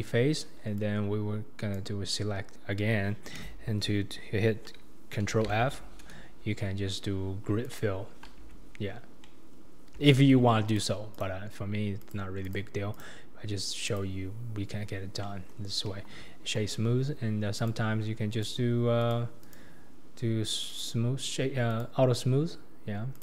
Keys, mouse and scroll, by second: 0.8 click, 5.4 ctrl+f, 8.5 Tab, 8.8-9.3 scroll down 2, 9.3-9.8 middle drag, 9.8-10.1 scroll down 2, 10.1-10.7 shift+middle drag, 10.7 click, 11.1-12.1 right drag, 12.4 click, 12.9-14.3 right drag, 14.3-14.9 scroll up 4, 14.9-15.3 scroll down 2, 15.3-15.9 middle drag, 15.9 KP_1, 17.6 click, 18.3-20.8 drag, 21.7 click, 23.1 click.